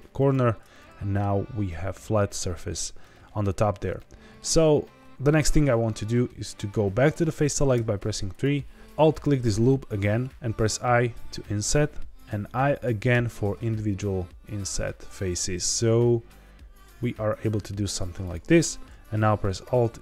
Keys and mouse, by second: 0.1 ctrl+click, 0.7 middle click, 2.4 middle click, 3.9 middle click, 7.7 3, 9.0 alt+click, 10.6 i, 13.1 i, 18.2 click, 19.6 alt+e.